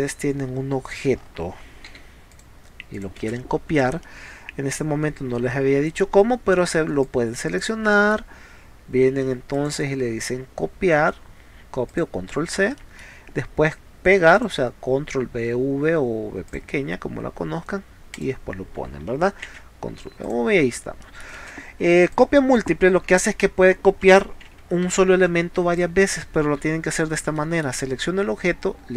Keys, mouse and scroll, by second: 0.9 click, 1.2 middle click, 2.0 p, 2.4 click, 3.0 click, 3.3 space, 4.1-5.3 middle drag, 7.1 click, 7.9 middle click, 9.6 click, 11.9 click, 12.8 middle click, 14.4 click, 16.5 click, 18.2 click, 19.5 ctrl+v, 20.3 click, 21.0 middle click, 21.4 space, 22.1 click, 24.5 ctrl+z, 25.8-27.0 drag, 27.4 middle click.